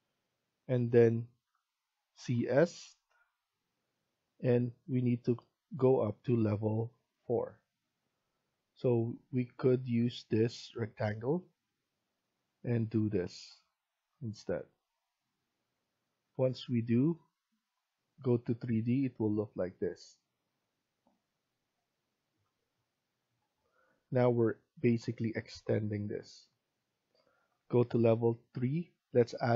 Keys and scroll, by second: 15.8 Escape, 16.0 Escape.